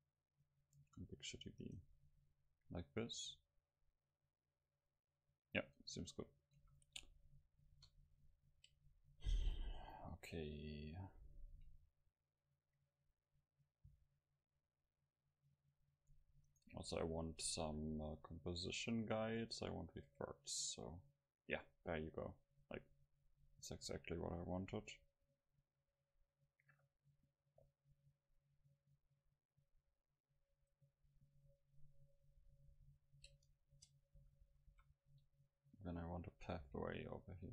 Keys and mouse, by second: 1.7-4.7 right drag, 2.3-5.3 middle drag, 6.6 a, 7.7 KP_0, 16.5-18.6 right drag, 18.6 middle click, 18.8-21.2 drag, 21.2-22.9 middle drag, 30.6 right click, 31.0 middle click, 31.2-32.5 drag, 32.7 KP_7, 33.7 Tab, 34.2 a, 34.6 a, 34.7 a, 35.4 middle click, 36.7 c, 37.1-37.5 middle drag.